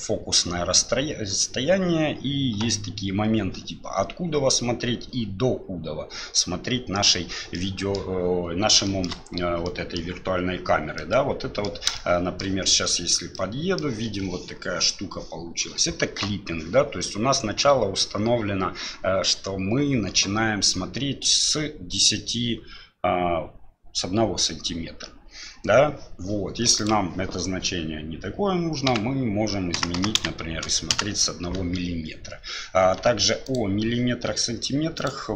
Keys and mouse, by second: 7.5 click, 8.8 shift+click, 9.6 click, 10.3 f, 11.0 middle click, 11.9 shift+middle click, 13.3 middle click, 26.8-31.6 drag, 29.9 KP_0, 33.4 click, 35.1 click.